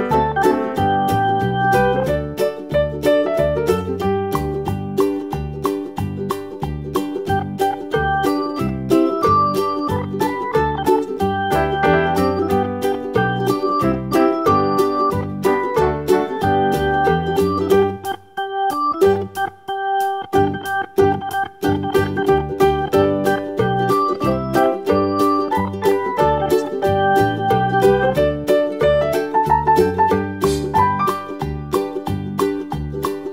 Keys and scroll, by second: 6.5 6, 6.8 Return, 9.0 super+d, 32.1 super+a.